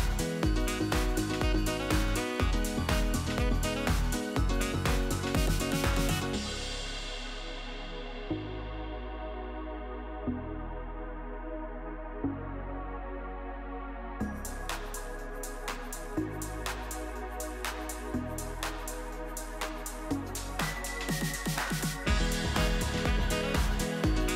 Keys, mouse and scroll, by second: 0.9 click, 1.3 g, 3.0-3.4 middle drag, 3.4-3.9 scroll down 1, 3.9 KP_3, 4.0 KP_1, 4.4-5.3 scroll down 4, 5.3 click, 5.5-6.0 middle drag, 6.0 KP_3, 6.7 e, 7.9-9.5 middle drag, 9.5 click, 10.0-12.0 shift+click, 12.4-12.7 scroll up 1, 12.7-13.2 shift+middle drag, 13.2 shift+click, 13.8 s, 15.2-17.9 middle drag, 17.9 KP_3, 20.0 g, 23.0-24.3 middle drag.